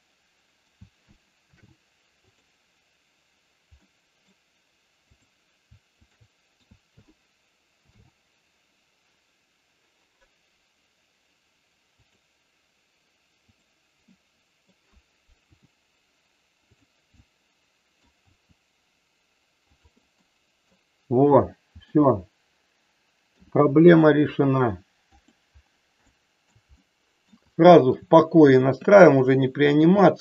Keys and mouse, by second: 3.7 ctrl+shift+middle click, 5.0 click, 6.0 shift+click, 13.5 click, 14.1 middle click, 15.4 r, 17.1-18.1 middle drag, 18.2 r, 20.1 middle click, 21.7 r, 22.0 middle click, 26.1 shift+middle click, 26.7 middle click, 27.5 shift+middle click, 28.7 r, 29.7 click, 30.0-30.2 middle drag.